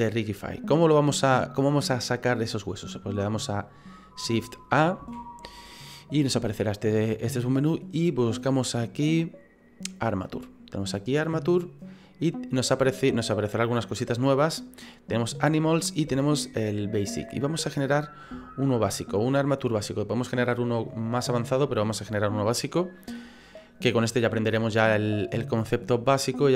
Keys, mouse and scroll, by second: 5.0 shift+a.